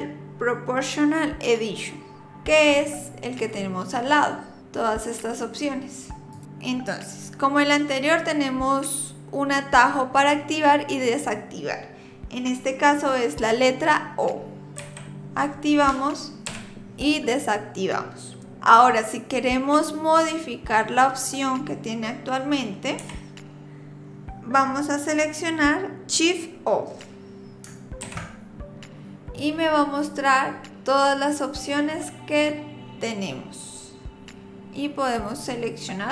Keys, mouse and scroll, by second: 4.6 click, 14.8 o, 16.5 o, 23.0 o, 28.0 shift+o.